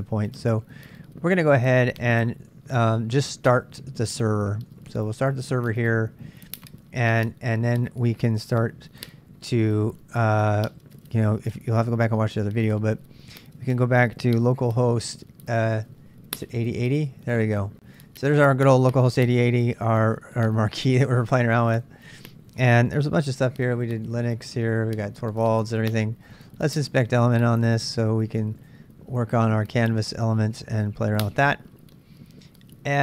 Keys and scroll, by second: 4.0-5.3 typing, 6.4 Return, 10.0 super+Tab, 14.3-15.2 typing, 15.9 Return, 23.1-24.7 typing.